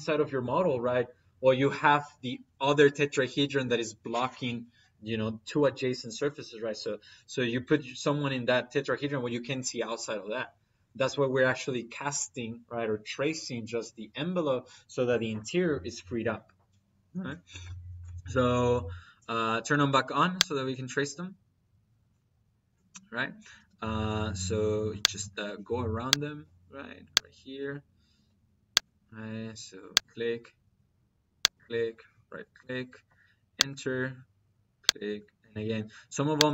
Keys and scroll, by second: 23.4 -, 28.0 -.